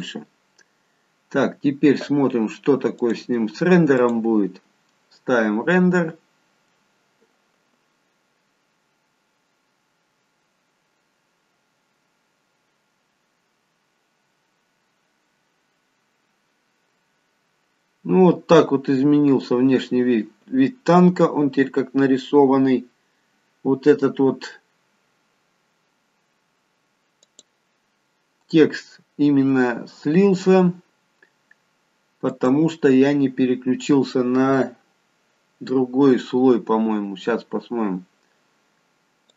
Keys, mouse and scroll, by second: 3.0 click.